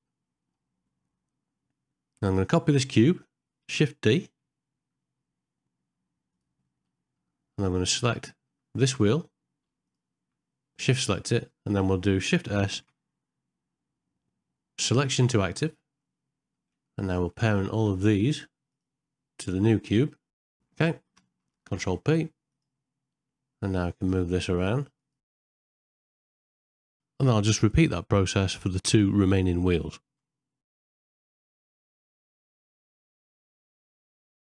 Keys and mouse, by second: 0.1 middle click, 4.3 shift+d, 6.9 middle click, 7.7 shift+middle click, 8.2 ctrl+middle click, 12.7 shift+s, 16.1 middle click, 16.8 ctrl+middle click, 17.0 shift+middle click, 17.7 shift+click, 18.1 shift+click, 18.5 shift+click, 19.1 middle click, 19.4 ctrl+middle click, 19.8 ctrl+middle click, 20.3 shift+click, 20.5 shift+click, 21.7 ctrl+p, 24.0 click, 25.0 click, 25.2 g, 26.2 middle click, 26.8 middle click, 27.0 shift+middle click, 27.2 shift+middle click, 27.8 shift+d, 28.5 shift+s, 28.8 middle click, 28.9 ctrl+middle click, 29.3 shift+click, 29.6 shift+click, 30.7 ctrl+p, 31.0 shift+middle click, 32.0 shift+d, 32.2 shift+click, 32.7 shift+s, 33.1 middle click, 33.3 middle click, 33.4 ctrl+middle click, 33.7 middle click, 34.0 shift+click, 34.2 shift+click.